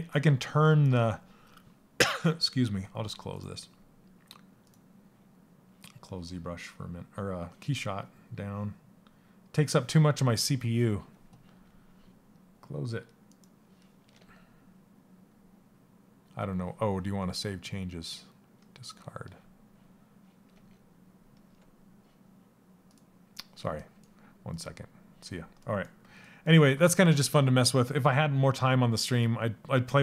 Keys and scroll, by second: 13.7 alt+Tab, 20.1 alt+Tab.